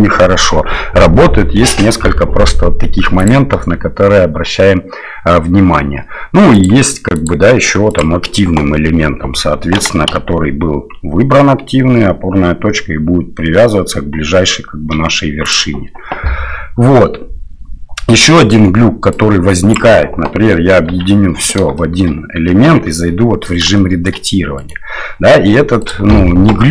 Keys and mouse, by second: 3.3-6.7 drag, 7.1-8.1 drag, 9.7 g, 19.2-19.7 drag, 20.9 ctrl+j, 21.8 shift+drag, 22.6 Tab, 23.7 shift+middle click, 24.5 click, 25.9-26.7 drag.